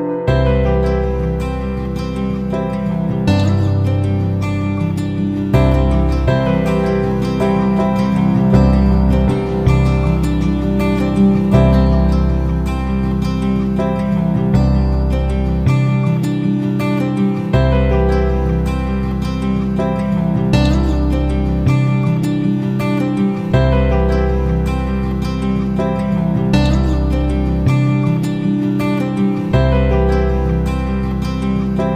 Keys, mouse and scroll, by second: 0.4-2.2 typing, 3.5 click, 6.2 F9, 6.8-12.0 drag, 13.3-31.9 drag.